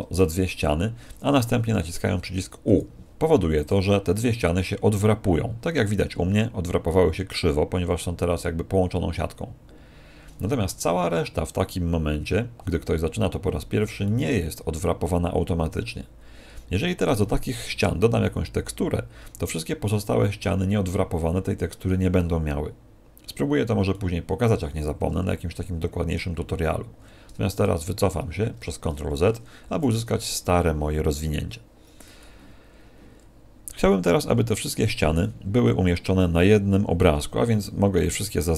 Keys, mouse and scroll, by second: 2.6 u, 14.0 middle click, 23.8 middle click, 27.6 ctrl+z, 29.9 a, 37.1 a, 38.2 s.